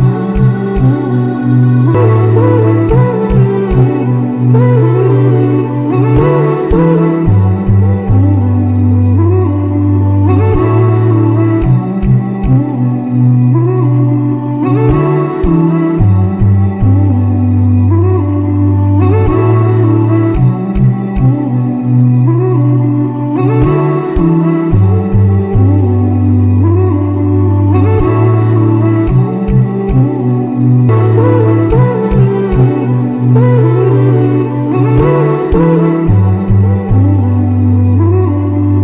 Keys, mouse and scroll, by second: 1.2-3.1 drag, 4.3 space, 6.4 space, 8.2 click, 9.6 click, 12.2 click, 14.4 click, 16.1-18.6 drag, 18.6-20.7 right drag, 20.7 click, 21.1 click, 22.3-23.3 right drag, 24.4 click, 28.7 click, 29.6 click, 31.5-32.8 drag, 35.3 click, 36.4 click, 37.9 click.